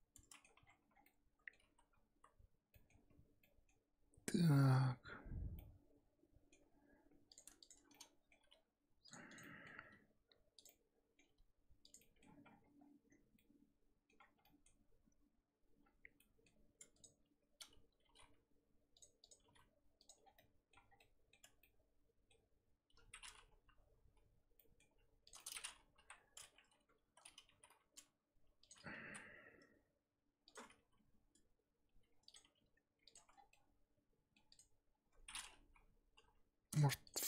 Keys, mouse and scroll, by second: 0.5 Tab, 0.6-1.0 scroll down 6, 1.0 middle click, 1.6 z, 1.9 scroll up 4, 2.1 z, 2.7 middle click, 3.0 scroll up 1, 3.1 Tab, 3.4 middle click, 3.8 scroll up 2, 4.8-5.6 scroll up 3, 5.6-7.3 middle drag, 7.3 click, 7.6 shift+click, 7.9 scroll down 1, 7.9 middle click, 8.4 g, 9.3 click, 9.4 middle click, 9.8 g, 10.7 middle click, 11.2 g, 12.0 middle click, 12.3 Tab, 12.4 scroll down 4, 12.6 scroll up 1, 12.7-13.3 scroll down 6, 13.3 middle click, 14.2 scroll up 3, 14.4-15.8 middle drag, 15.8-16.1 scroll up 4, 16.1 Tab, 16.2 middle click, 16.9 click, 18.0 g, 19.2 click, 19.4 g, 20.2 scroll down 4, 20.4 middle click, 20.7 scroll up 1, 20.9 scroll down 1, 21.0 middle click, 21.4 Tab, 21.6-22.9 middle drag, 22.9 scroll up 3, 24.5 scroll up 1, 24.6 middle click, 25.2 click, 25.4 middle click, 25.9 KP_1, 26.7 Tab, 27.0 a, 27.4 g, 30.8 r, 32.4 g, 33.1 Tab, 33.3 scroll down 3, 33.5-34.5 middle drag, 34.5 click, 35.3-36.1 scroll up 1, 36.1 KP_3, 36.7 click, 37.0 shift+click.